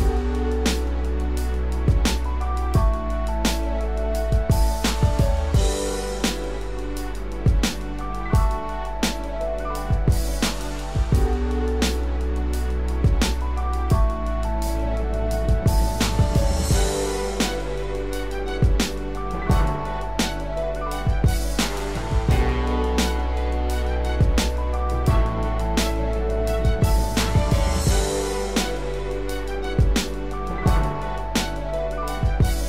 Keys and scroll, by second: 24.7 ctrl+-.